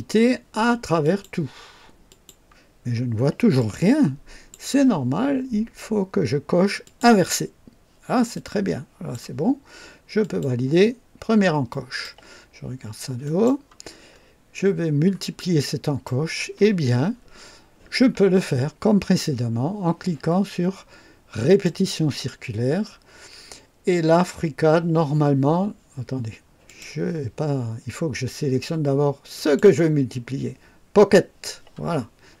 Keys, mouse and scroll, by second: 1.0 click, 2.0 click, 3.5 click, 6.8 click, 8.3-9.3 drag, 10.1 click, 11.6 click, 13.2 click, 14.0-14.7 scroll up 3, 14.7 scroll down 1, 15.3-16.2 right drag, 21.4 click, 26.6 click, 29.3 click.